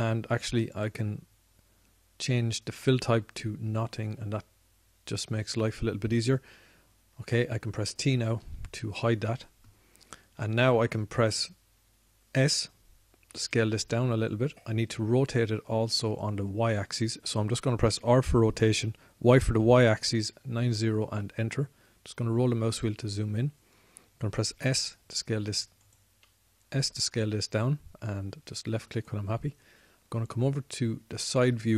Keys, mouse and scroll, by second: 2.0 click, 9.8 t, 14.7 s, 17.5 click, 19.2 r, 25.8 s, 27.5 s.